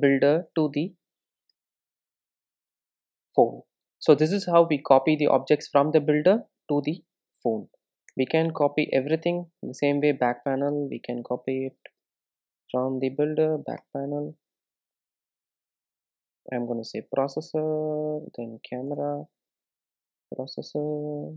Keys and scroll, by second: 9.2 Return, 15.3 super+d, 17.2 super+d, 17.8 Return.